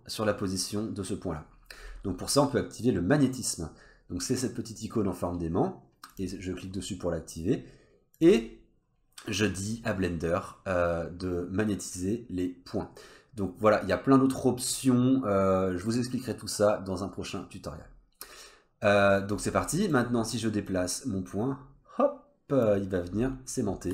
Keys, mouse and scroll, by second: 6.1 click, 8.2 click, 19.0-19.3 scroll down 1, 19.3-19.7 scroll up 1, 19.7 middle click, 20.7 click, 23.0-23.6 scroll down 3, 23.6-23.9 scroll up 2.